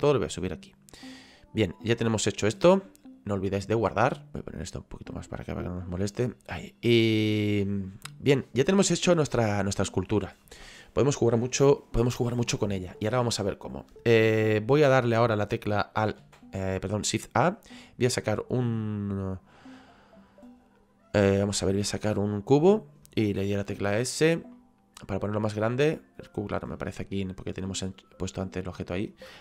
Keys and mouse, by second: 1.0 middle click, 3.4 click, 4.6 click, 6.6 shift+middle click, 7.9 middle click, 22.4 click, 24.2 click, 26.2 click, 28.1 click.